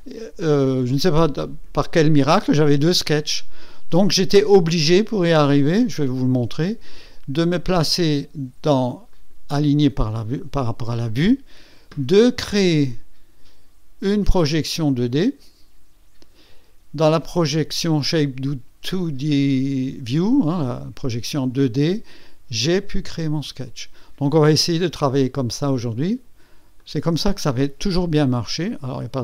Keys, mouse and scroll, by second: 5.4 click, 8.0 click, 9.1 click, 15.2 click, 21.4 click, 23.0 click, 25.0 click, 26.8 ctrl+click.